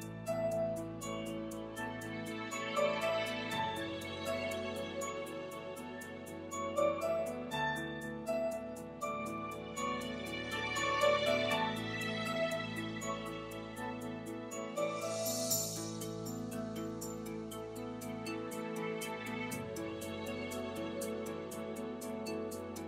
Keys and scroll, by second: 0.0-0.9 typing, 1.3 Return.